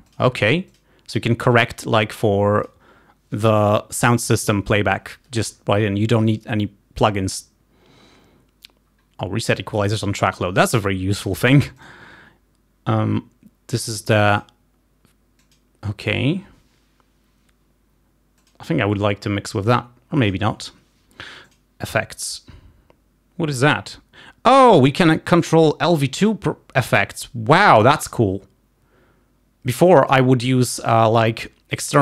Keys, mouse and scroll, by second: 0.7 click, 1.5 click, 2.7 click, 12.0 click, 14.4 click, 15.4 click, 18.6 click, 21.5 click, 26.9-27.2 scroll down 1.